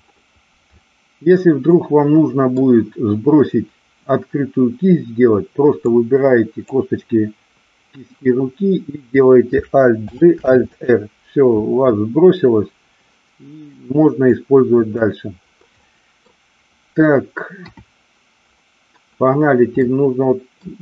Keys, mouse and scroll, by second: 1.7-2.6 middle drag, 5.9-6.9 drag, 10.0 alt+g, 10.5 alt+r, 14.2 click, 15.9 middle click, 17.5 KP_1, 19.7 middle click.